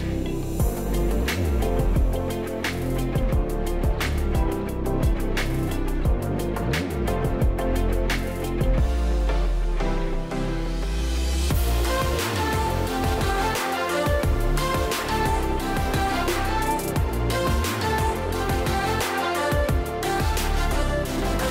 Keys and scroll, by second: 8.9 space, 12.2 ctrl+0, 13.2 space.